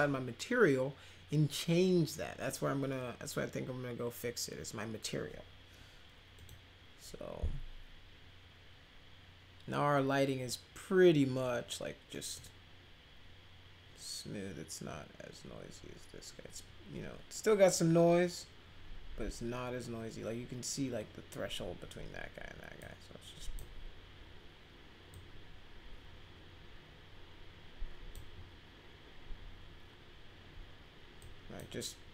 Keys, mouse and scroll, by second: 6.3 click, 12.1 middle drag, 22.8 click, 25.1-28.1 drag, 31.2-31.5 drag.